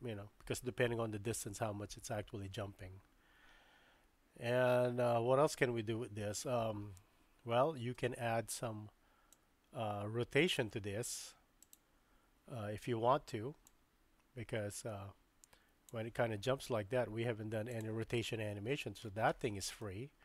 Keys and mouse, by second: 7.9 space, 9.3 click, 13.7-15.9 drag, 17.7 click, 19.8-20.2 shift+middle drag.